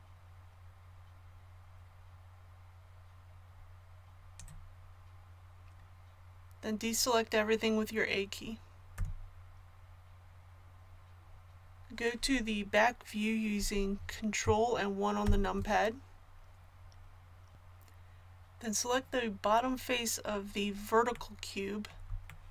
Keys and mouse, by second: 8.9 a, 15.2 ctrl+KP_1.